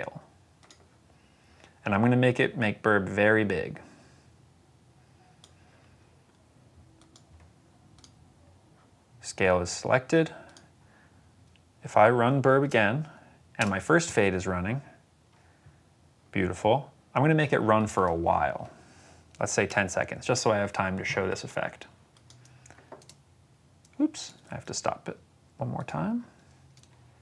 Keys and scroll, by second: 11.7 s, 12.5 space, 13.5 space, 19.3-20.1 typing, 20.3 Return, 22.9 space, 24.6 s, 26.1 s, 26.6 v.